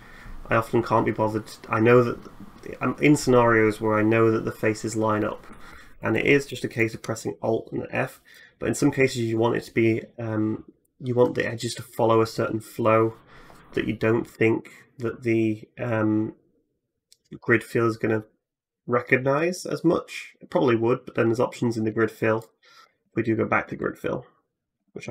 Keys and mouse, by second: 6.5 alt+middle click, 8.2-21.7 middle drag, 22.2 alt+middle click, 24.6 alt+f.